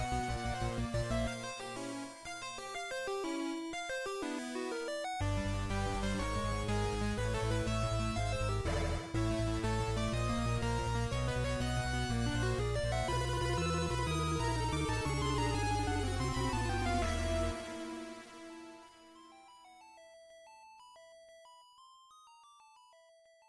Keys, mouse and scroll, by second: 10.4 click, 12.9 scroll up 2, 15.3 scroll down 1, 15.8-16.4 scroll down 1, 16.4-16.8 scroll down 1, 21.7 click, 23.3 click.